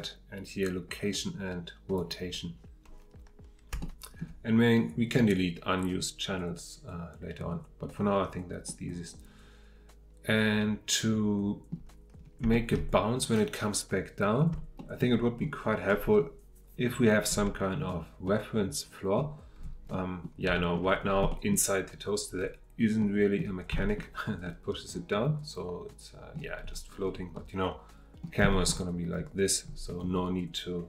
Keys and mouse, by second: 3.8-4.2 shift+middle drag, 8.6-11.6 middle drag, 12.5 shift+middle drag, 14.8 shift+middle drag, 18.2-19.1 middle drag, 19.9-20.2 middle drag, 20.5 shift+middle drag, 21.3 middle click, 23.0-23.4 middle drag, 23.8 shift+middle drag, 24.4-26.3 middle drag, 27.3-28.2 middle drag, 28.5 shift+middle click.